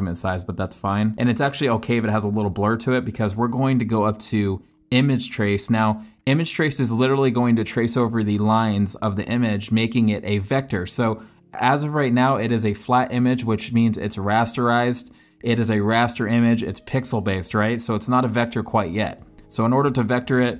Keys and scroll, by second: 1.1 space, 2.8 space.